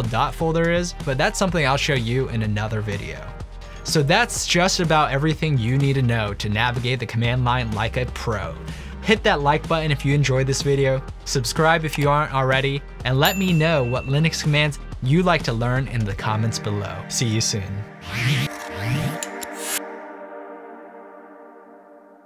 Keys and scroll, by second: 0.7-1.5 typing.